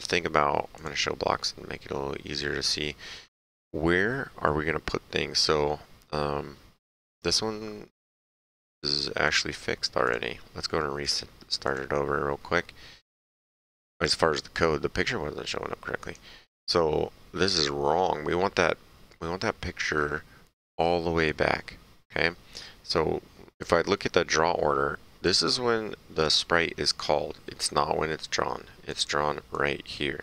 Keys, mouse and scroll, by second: 0.7 click, 10.0 click, 16.0 click, 25.3 click, 28.9 click.